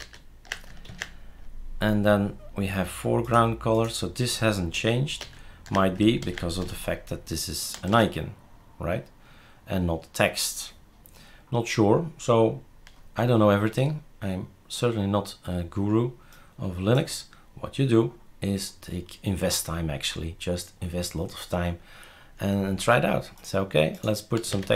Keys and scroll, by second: 0.0 ctrl+z, 0.9 ctrl+s, 4.8 ctrl+z, 5.2 ctrl+z, 6.2 ctrl+s, 7.8 shift+super+r, 24.2-24.7 typing.